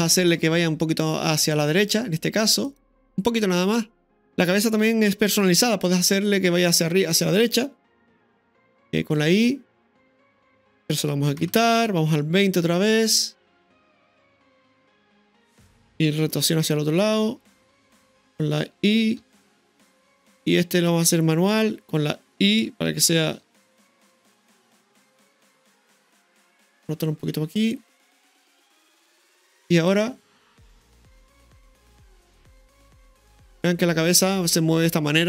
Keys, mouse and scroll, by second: 0.2 right click, 1.5 click, 2.7 right click, 3.4 middle click, 5.5 r, 9.0 i, 10.6 right click, 11.4 Delete, 12.4-15.6 drag, 16.4 r, 19.2 i, 20.6 click, 23.4 i, 25.4 click, 27.6 r, 29.8 click, 29.9 i, 30.1 space, 31.9-32.3 scroll down 1, 32.3-33.4 middle drag, 33.6 scroll down 1, 33.6-35.2 middle drag.